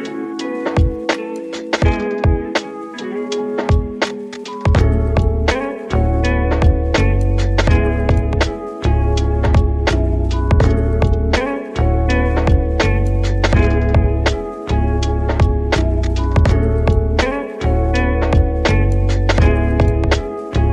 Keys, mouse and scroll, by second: 0.3 alt+z, 0.5 scroll, 0.6 scroll down 1, 0.7-3.5 middle drag, 2.4 scroll down 1, 3.5 Tab, 3.8-4.2 middle drag, 4.2 scroll up 3, 4.4 1, 4.8 alt+z, 5.1-5.7 shift+middle drag, 5.7 KP_1, 6.6 click, 7.2-7.5 scroll up 4, 7.5-8.0 shift+middle drag, 8.0 g, 8.3 z, 10.3 click, 10.5 scroll down 3, 10.7 middle click, 11.0 Tab, 11.2 scroll down 3, 11.4 middle click, 11.8 alt+z, 12.8 middle click, 13.2 click, 13.8-15.1 middle drag, 15.1 shift+a, 17.7 click, 19.1 click, 20.3 ctrl+z.